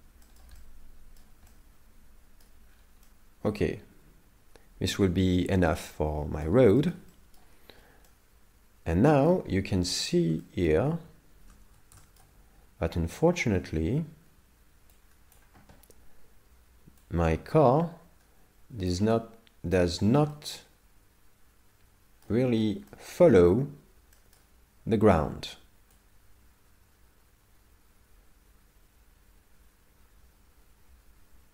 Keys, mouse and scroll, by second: 0.3 shift+middle click, 0.6 middle click, 1.5 middle click, 2.7 scroll down 6, 7.8 scroll up 5, 8.1 middle click, 9.5 scroll up 1, 9.9 middle click, 10.4 shift+middle click, 11.4 shift+space, 12.0 shift+middle click, 15.0 click, 17.1 click, 19.1 middle click, 20.0 shift+middle click, 20.3 middle click, 22.5-22.9 scroll up 5, 22.9 shift+middle click, 24.2 shift+middle click, 26.0 click.